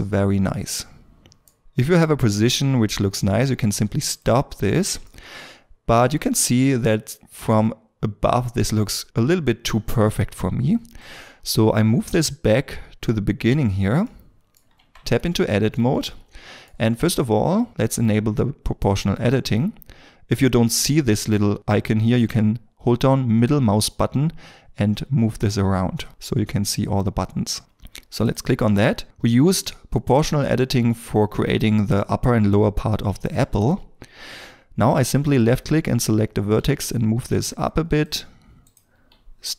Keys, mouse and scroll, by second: 5.1 middle click, 14.0 middle click, 15.1-15.5 scroll, 15.5 shift+middle click, 15.9 shift+middle click, 23.9 middle click, 32.7-34.0 scroll up 1.